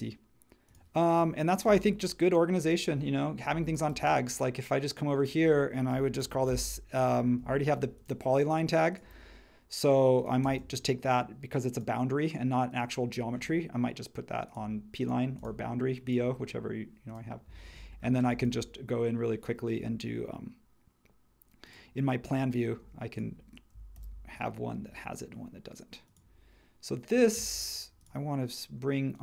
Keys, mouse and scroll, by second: 1.6 space, 6.0-6.9 typing, 7.4 Escape, 22.8 space, 23.9 super+e.